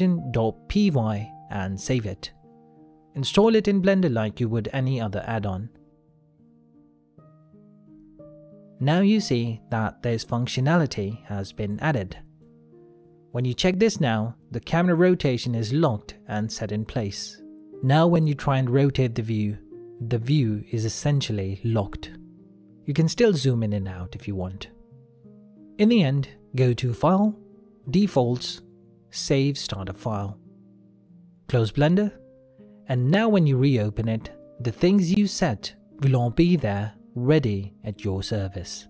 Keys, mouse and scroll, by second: 3.1 ctrl+middle click, 3.3 click, 14.1 click, 14.8 middle click, 16.4 click, 16.7 middle click, 17.2-17.8 scroll down 1, 17.8 click, 18.1 middle click, 19.1 click, 20.3 n, 21.6 click, 22.0 n, 22.6 middle click, 24.1-24.5 scroll down 1, 24.5-24.9 scroll up 1, 25.0 click.